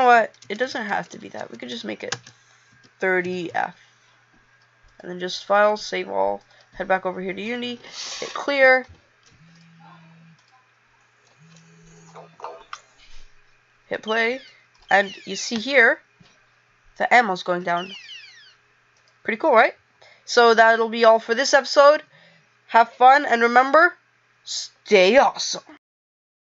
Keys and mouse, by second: 9.6 click.